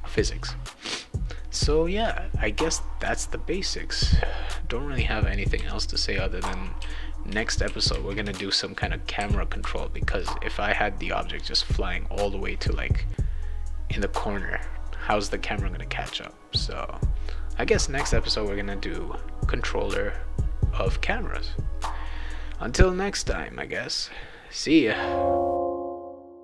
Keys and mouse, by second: 2.9 click, 4.2-9.9 right drag, 5.5-9.5 typing.